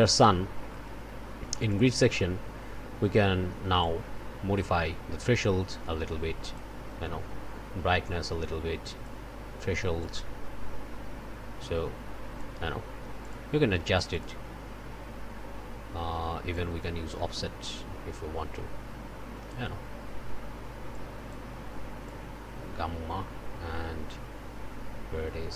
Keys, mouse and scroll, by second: 0.0 middle click, 0.4 scroll up 1, 0.9 click, 1.5 click, 3.8-6.7 drag, 8.0-9.2 drag, 10.0-12.6 drag, 13.2 click, 13.9 click, 16.5-19.7 drag, 20.9 click, 22.0-25.5 drag.